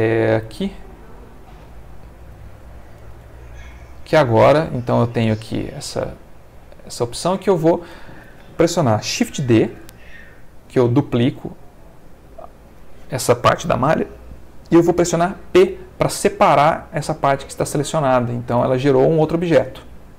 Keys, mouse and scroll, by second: 2.4 middle click, 3.1 z, 4.2 z, 4.8 click, 5.3-7.9 middle drag, 8.1 ctrl+middle click, 9.6 shift+d, 12.7 Escape, 15.6 p, 17.8 click, 18.6 Tab, 19.5 click.